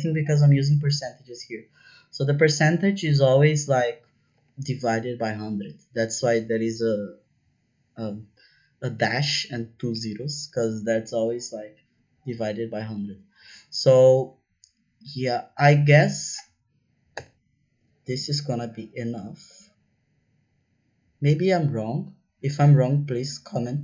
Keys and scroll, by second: 17.1 Return, 19.5 Up.